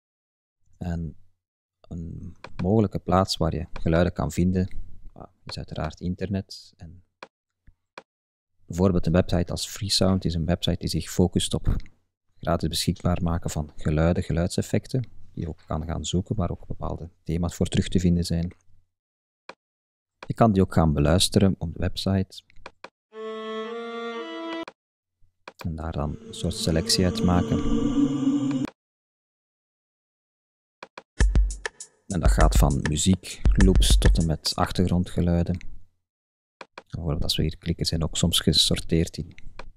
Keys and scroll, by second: 14.0 Tab.